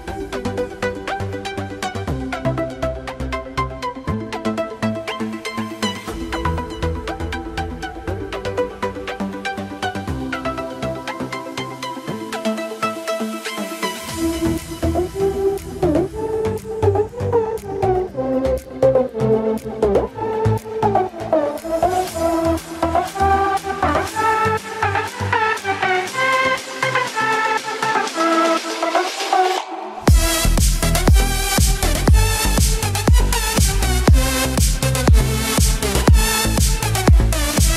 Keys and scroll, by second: 15.8 ctrl+j, 25.7 ctrl+j.